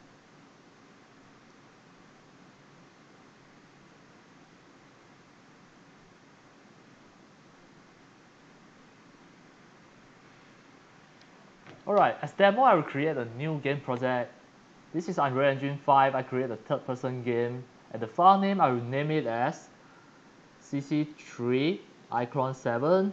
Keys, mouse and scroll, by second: 13.9 click, 16.4 click, 18.1 click, 20.4-23.1 typing.